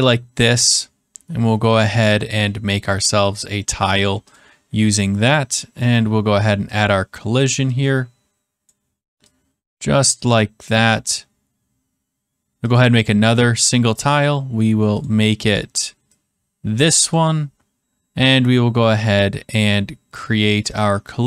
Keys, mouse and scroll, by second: 4.3 click, 5.9 click, 6.7 click, 8.6 click, 9.7 click, 10.7 click, 12.7 click, 13.9 click, 15.0 click, 17.1 click, 20.7 click.